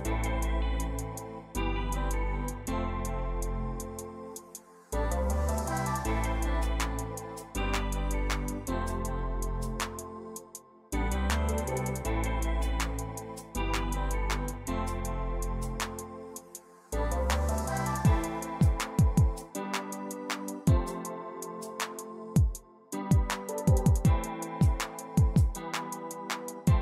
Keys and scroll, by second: 0.4-2.7 typing, 5.1 r, 6.7-9.3 typing, 17.4 typing, 24.3-26.5 typing, 26.5 Tab.